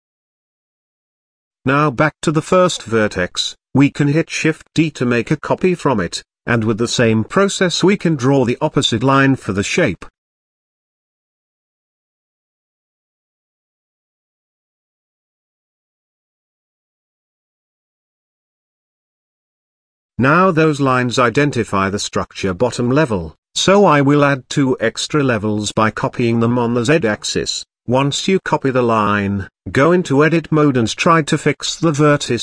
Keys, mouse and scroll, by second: 0.8-1.7 scroll up 2, 1.7 click, 2.7 shift+d, 6.4 shift+middle click, 6.8-8.2 scroll down 2, 10.9 e, 13.9 e, 16.0-16.3 scroll down 2, 16.3 shift+middle click, 17.1 e, 19.0-19.5 scroll down 2, 19.5-21.1 middle drag, 21.1-21.8 scroll up 3, 21.8 a, 22.8 shift+d, 25.6 shift+r, 29.9 KP_7.